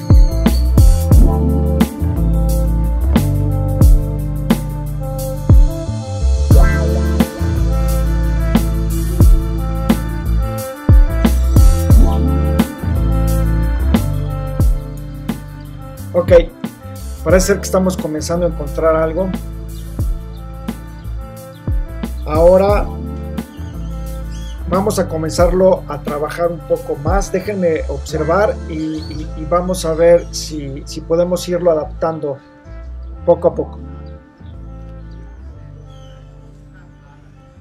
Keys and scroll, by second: 1.9 v, 6.4 l, 8.9 BackSpace, 9.1 super+d, 9.6 super+space, 15.0 super+0, 35.1 shift+super+2.